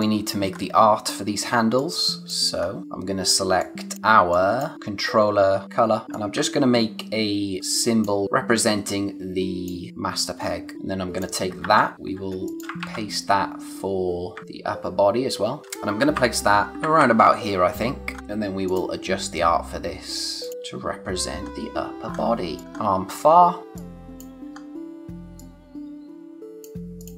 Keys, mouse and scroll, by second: 0.5-0.8 scroll up 1, 1.0 click, 1.5 space, 1.8 click, 2.0 space, 2.6 scroll up 1, 2.8 click, 6.1 alt+click, 8.2 click, 11.6 ctrl+c, 11.9 click, 12.1 scroll down 1, 12.3 space, 12.4 click, 12.8 ctrl+v, 14.4 shift+Up, 15.6 space, 16.1 shift+Up, 18.1-18.7 scroll up 1, 18.7 click, 20.4 ctrl+click, 20.4 scroll up 1, 21.0-21.5 scroll down 1, 22.2 space, 22.5 click, 22.7 scroll up 1, 23.5 click, 24.5 scroll up 1, 25.4 click.